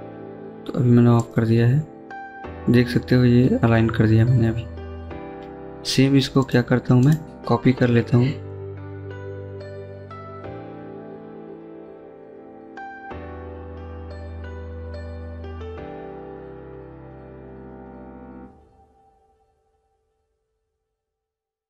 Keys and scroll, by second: 4.1 Escape, 4.3 Escape, 7.2 Delete, 9.8 c, 11.1 Escape, 12.2 typing, 13.8 Escape, 15.2-16.0 typing, 17.8-18.5 typing.